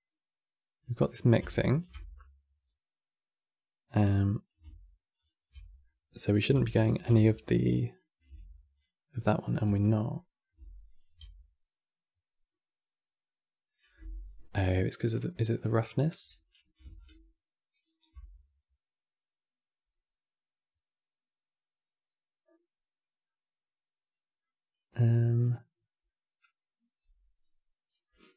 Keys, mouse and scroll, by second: 1.4 ctrl+shift+click, 4.9 ctrl+shift+click, 5.5-6.4 middle drag, 6.4 ctrl+shift+click, 7.7 middle click, 8.4 ctrl+shift+click, 9.9 middle click, 10.6 ctrl+shift+click, 15.0-16.7 middle drag, 16.7 ctrl+shift+click, 22.9-28.3 middle drag.